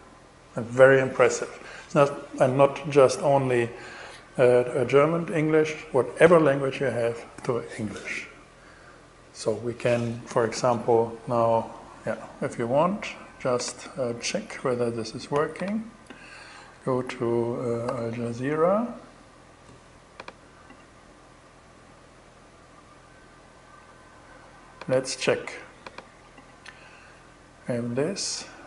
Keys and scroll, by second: 16.9-18.1 typing.